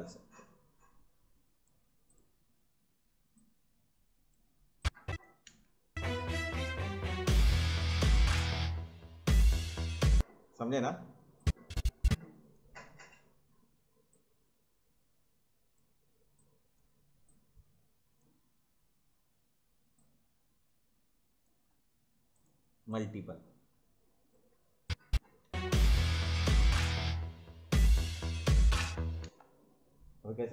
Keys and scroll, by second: 5.5 space, 10.1 space, 25.4 space, 29.2 space.